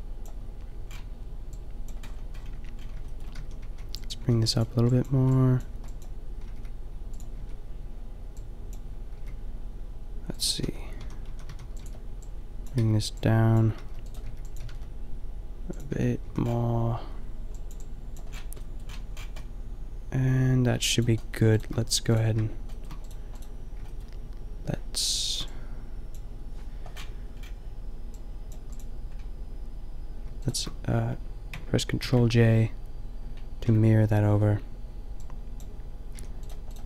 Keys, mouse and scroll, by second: 0.2 click, 2.5 Tab, 3.4-6.4 typing, 7.1-8.8 drag, 7.3 Tab, 9.1 g, 10.3 drag, 10.7 Tab, 11.0-14.6 typing, 15.9 Tab, 16.2 a, 21.2-25.4 middle drag, 25.4 drag, 26.9-27.7 middle drag, 29.2-30.3 drag, 31.9 ctrl+shift+j, 33.6 Tab, 34.3 Tab, 36.1 a.